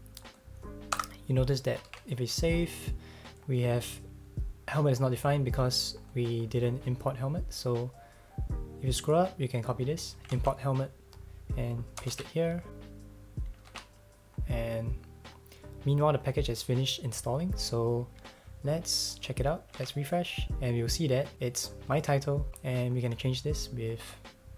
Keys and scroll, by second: 0.9 BackSpace, 1.9 super+s, 10.3 super+c, 12.1 Return, 12.1 super+v, 13.7 super+s, 19.8 super+r.